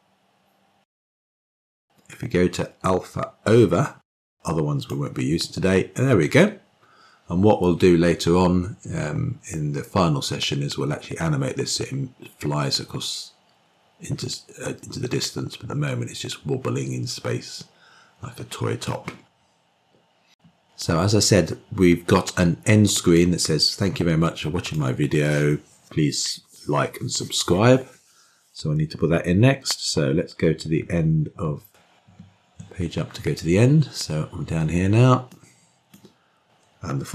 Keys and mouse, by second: 0.2-6.0 drag, 15.3-20.1 drag, 24.2-25.8 drag, 32.4 Page_Up, 33.1 Page_Up, 36.3-37.0 drag.